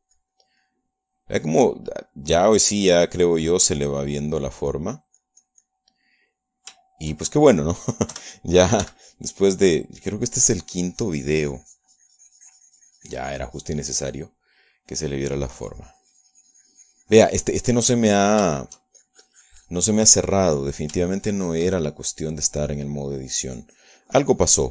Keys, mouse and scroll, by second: 0.0 click, 2.0-3.3 middle drag, 3.6-5.8 drag, 6.1-7.2 drag, 7.4-9.3 middle drag, 9.5 3, 10.2 f, 11.0 click, 11.4-16.4 drag, 16.6-19.7 drag, 19.9 shift+middle click, 20.4-22.3 shift+drag, 22.4-23.8 shift+middle drag, 24.4 shift+middle click.